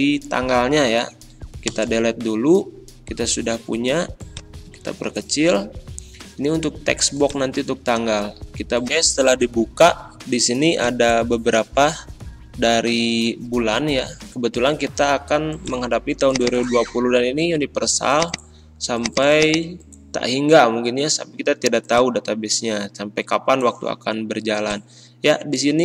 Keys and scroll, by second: 1.7 BackSpace.